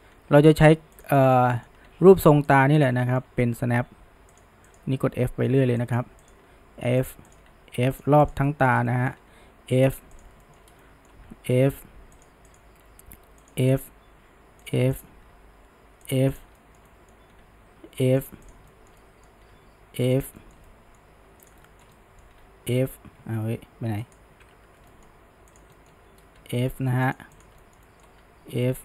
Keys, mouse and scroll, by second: 0.1 f, 1.3 click, 1.5-1.9 middle drag, 1.9 f, 2.8 drag, 3.1-3.8 shift+middle drag, 3.8 f, 4.7 click, 5.1 f, 6.3 drag, 6.5 f, 7.3 click, 7.5 f, 8.3 click, 8.5 shift+middle drag, 8.7 scroll down 1, 8.9-9.4 middle drag, 9.4 f, 10.2 drag, 10.5 shift+middle drag, 10.7 scroll down 1, 10.8-11.3 middle drag, 11.3 f, 12.5 click, 12.9 f, 13.8 click, 14.1 f, 15.0 drag, 15.4 f, 16.4 click, 16.6-17.5 shift+middle drag, 17.5 f, 18.5 click, 18.7 shift+middle click, 19.6 f, 20.4-21.5 shift+middle drag, 21.5 click, 21.7-22.5 shift+middle drag, 22.5 f, 24.3 ctrl+z, 24.9-25.6 shift+middle drag, 25.6 drag, 25.8-26.4 middle drag, 26.4 f, 27.4 drag, 27.6-28.3 shift+middle drag, 28.3 f.